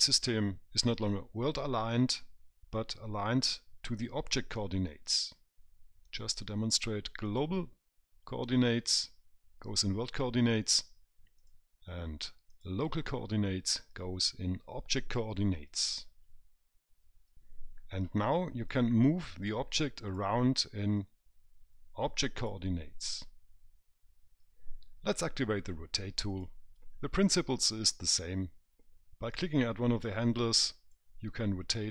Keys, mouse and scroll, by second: 6.4 click, 11.7 click, 19.0 click, 21.3 click, 26.6 click, 29.7 click.